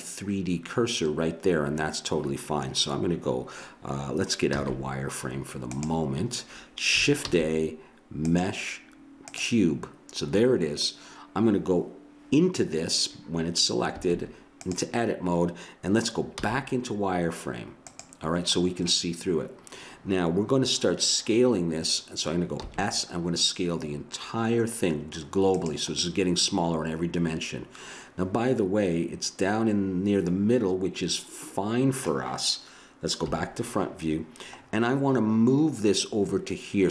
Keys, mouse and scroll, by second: 4.5 z, 7.2 shift+a, 13.9 Tab, 16.4 z, 18.7-19.8 middle drag, 22.6 s, 26.0 middle click, 26.2-27.6 middle drag, 33.2 KP_1.